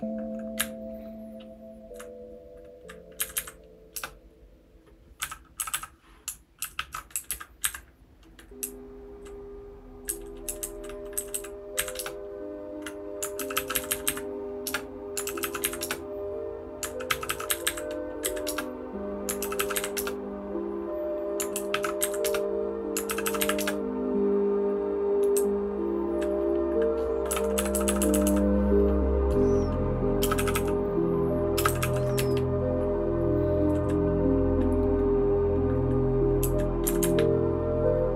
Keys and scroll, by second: 0.6 Up, 1.1-1.9 Up, 3.2 Up, 3.3 Up, 4.0 Return, 5.2 n, 5.6 n, 5.6 n, 6.6 ctrl+w, 6.7 ctrl+w, 7.1 Down, 7.3 Down, 7.6 Up, 8.6 Down, 9.1 Down, 10.1 Down, 10.4 Down, 10.6 Down, 10.7 Down, 11.1 Down, 11.3 Down, 11.7 Up, 12.0 Return, 13.3 ctrl+w, 13.5 ctrl+w, 13.7 Up, 13.9 Up, 14.0 Up, 14.7 Return, 15.2 ctrl+w, 15.4 ctrl+w, 15.6 Up, 15.8 Return, 17.1 ctrl+w, 17.2 ctrl+w, 17.5 Up, 17.6 Up, 18.2 Down, 18.5 Return, 19.4 ctrl+w, 19.6 ctrl+w, 19.7 Up, 20.0 Return, 21.5 ctrl+w, 21.7 ctrl+w, 22.0 Up, 22.3 Return, 23.0 ctrl+w, 23.2 ctrl+w, 23.4 Up, 23.6 Return, 25.3 Down, 25.8 Down, 27.3-28.2 typing, 30.2 space, 30.3 e, 30.5 e, 31.5 space, 31.6 e, 32.1 Down, 32.3-33.6 Down, 36.4 Down, 36.8 Up, 37.0 Up, 37.1-38.1 Up.